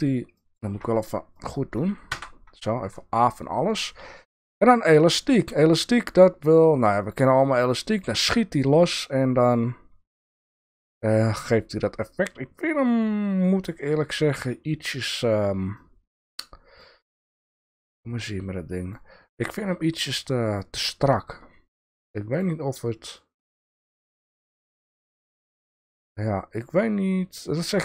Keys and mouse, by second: 0.3 click, 1.3 click, 2.1 a, 2.9-4.4 drag, 7.0 click, 7.8 click, 10.3 click, 15.8-16.2 drag, 16.9 click, 17.9-18.9 drag, 21.1-22.4 drag, 23.0-25.4 drag.